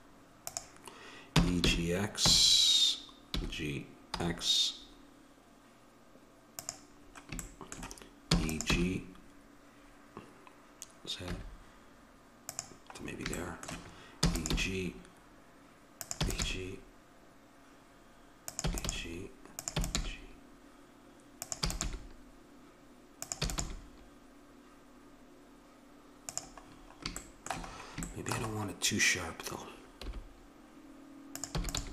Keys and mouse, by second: 0.4-2.3 drag, 1.3 e, 8.3 e, 8.7 g, 14.2 e, 14.6 g, 16.2 e, 16.4 g, 18.5 g, 18.7 e, 19.8 e, 20.0 g, 21.7 e, 21.8 g, 23.4 e, 23.6 g, 28.6-29.6 middle drag, 30.1 g, 31.5 e.